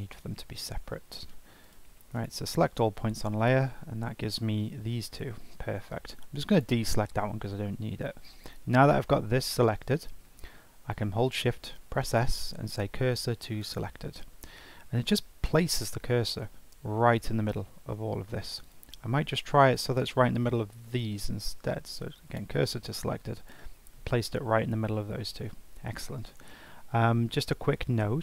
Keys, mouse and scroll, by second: 2.2-3.5 right drag, 3.5 g, 5.9-6.5 ctrl+drag, 11.4 shift+s, 18.6 click, 21.2 shift+s.